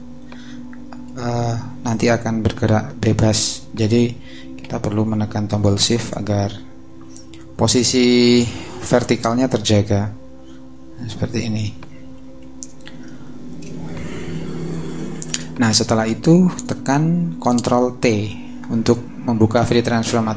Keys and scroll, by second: 4.6 super+z, 5.6 shift+super+z, 12.4 shift+super+-, 13.0 super+-, 13.7 shift+super+-.